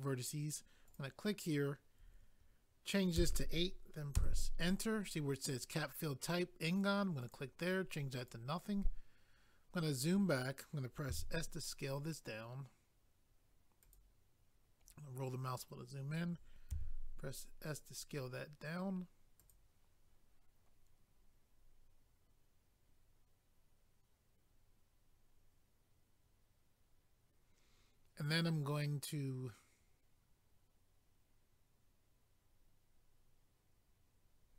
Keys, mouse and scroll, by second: 0.9 click, 1.0 click, 4.2 Return, 7.2 click, 7.3 click, 8.2 click, 8.3 click, 9.0 click, 9.7 scroll down 1, 11.1 s, 13.8 click, 14.0 click, 14.8 scroll up 1, 16.7 s, 19.4 click, 19.5 click.